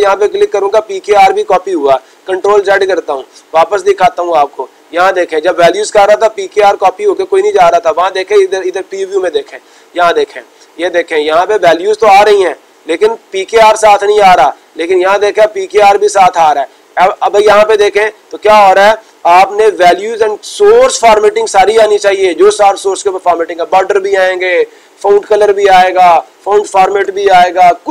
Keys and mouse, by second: 4.9-6.0 drag.